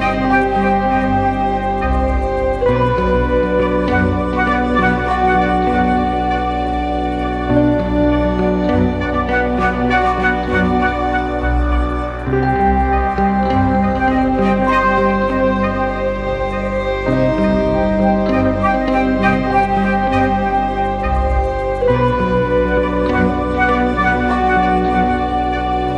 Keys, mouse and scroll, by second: 7.1 Return, 12.2 alt+right click, 15.4 alt+click, 21.4 right click, 23.2-24.0 typing.